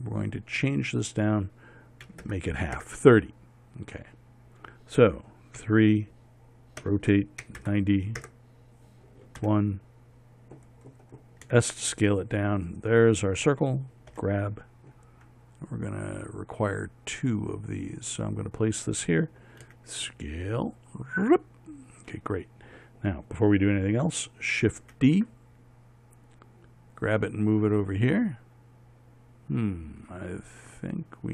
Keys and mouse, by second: 6.2 KP_3, 7.4 r, 10.0 KP_1, 12.1 s, 14.7 g, 20.3 s, 25.3 shift+d.